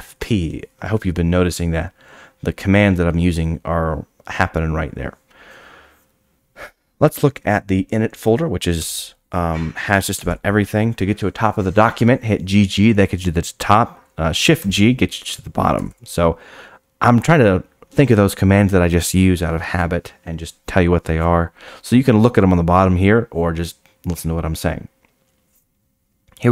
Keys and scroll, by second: 14.5 shift+g.